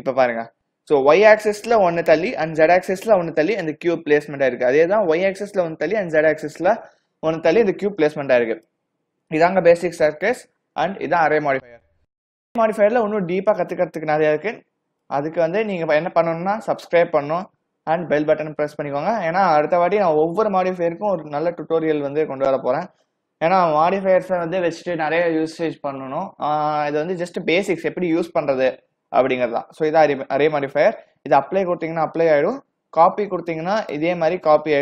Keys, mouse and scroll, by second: 8.1 click, 9.4 click, 14.1 click, 33.9 click, 34.5-34.8 scroll down 5.